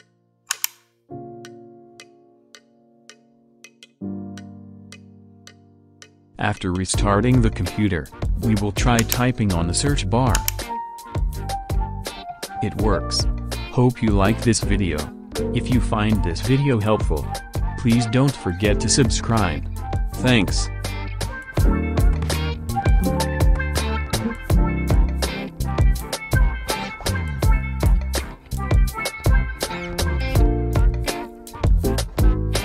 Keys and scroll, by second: 10.9-14.7 typing.